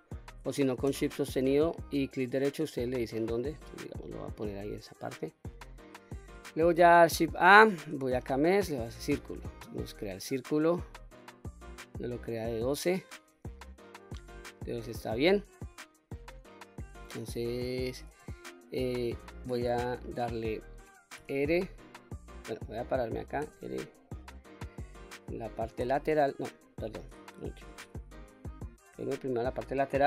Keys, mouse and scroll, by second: 2.2 shift+right click, 2.7 shift+right click, 3.4 shift+right click, 7.1 shift+a, 11.2 click, 21.1 r, 23.3 KP_1, 25.7 KP_3, 26.6 click, 27.5 ctrl+z, 28.8 KP_3.